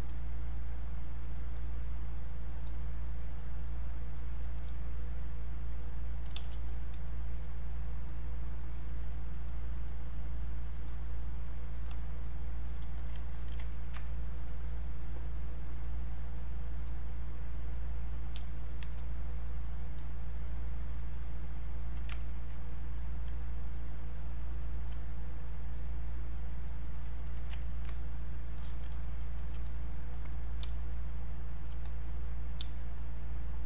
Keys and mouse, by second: 0.0-6.4 drag, 6.4 q, 6.7-13.4 drag, 13.4 alt+click, 13.7 ctrl+right click, 14.0-18.0 drag, 18.4 space, 18.8 click, 18.9 space, 19.2 click, 22.2 ctrl+right click, 24.8 alt+click, 25.3 click, 27.6 ctrl+alt+right click, 27.8 ctrl+click, 29.6 click, 30.7 space, 31.0 click, 31.2 space, 31.9 click, 32.6 space, 33.5 space.